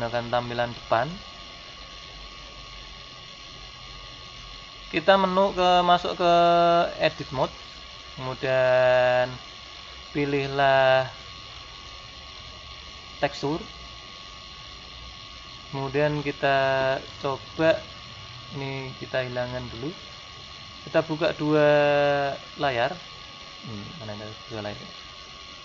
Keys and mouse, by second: 11.8-13.5 drag, 20.6-22.3 drag, 22.7-24.5 drag, 25.0-25.6 drag.